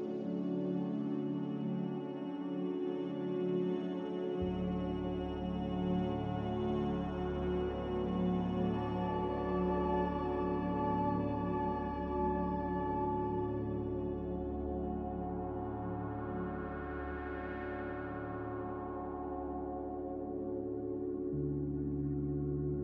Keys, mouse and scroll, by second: 9.5 click, 13.0 a, 22.7 z.